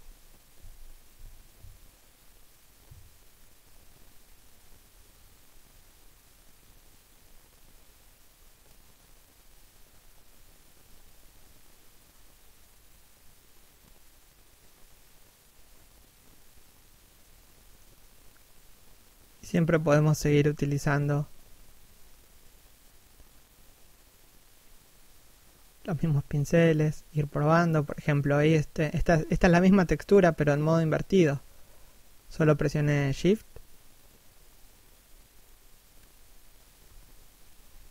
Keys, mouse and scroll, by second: 0.4 scroll down 1, 1.2 middle click, 2.4-2.9 scroll down 1, 2.9 middle click, 4.6 middle click, 5.3 scroll up 1, 6.3 middle click, 14.4 right click, 16.1 shift+middle click, 17.3 click, 19.1 middle click, 21.7 shift+a, 21.9 middle click, 23.1 click, 29.0 middle click, 29.9 scroll down 1, 30.3 middle click, 32.1 scroll up 1, 32.6 click, 35.2 shift+a, 35.6 click.